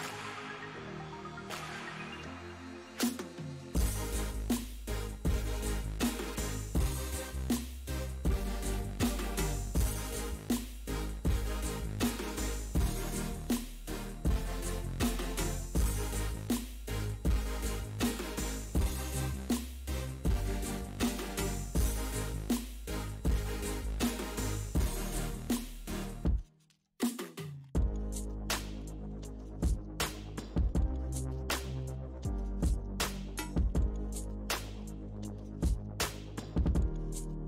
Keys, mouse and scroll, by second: 0.2 f, 0.9 middle click, 1.6 click, 2.2 f, 3.0-4.9 drag, 4.9 middle click, 5.9 ctrl+click, 6.3 middle click, 6.8 ctrl+click, 7.6 middle click, 8.2 click, 9.1 middle click, 9.6-11.2 ctrl+drag, 11.2 middle click, 11.8-14.3 drag, 14.3 middle click, 15.0 ctrl+click, 15.9-17.2 middle drag, 17.2 click, 18.2 f, 19.2 f, 20.0-21.7 drag, 21.7 middle click, 22.1-25.5 ctrl+drag, 25.5 middle click, 26.0 ctrl+click, 26.5-27.7 middle drag, 27.7 f, 28.4 ctrl+click, 29.4 middle click, 29.8-31.0 drag, 31.0 middle click, 31.7 click, 32.5-33.6 middle drag, 33.6 f, 34.3 middle click, 34.8 f, 35.6 ctrl+click, 36.4 middle click, 37.0 ctrl+click.